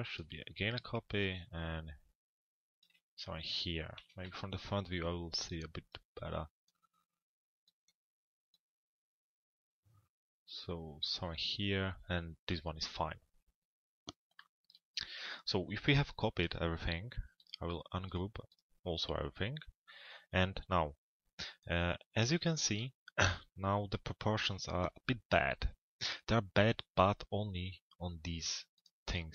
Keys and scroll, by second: 3.7 f, 4.2 z.